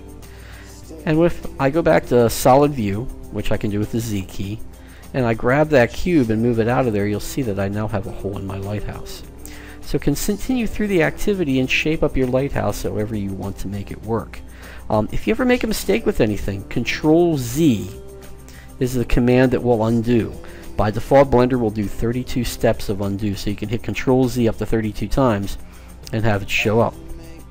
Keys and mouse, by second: 3.5 z, 4.8-6.2 right drag, 6.0 g, 6.2 middle click, 7.3-9.1 middle drag, 17.5 ctrl+z.